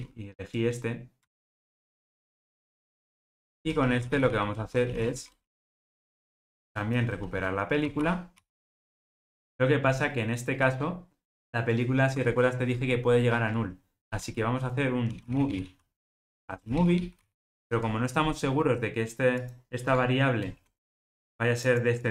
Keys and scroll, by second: 1.2 Return, 1.6 super+z, 3.1 Return, 9.4 ctrl+alt+o.